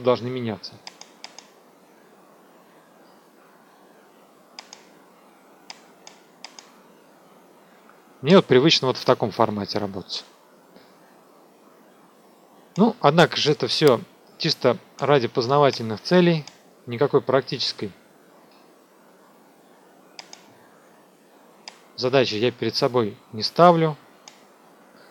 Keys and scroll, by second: 24.5 F2.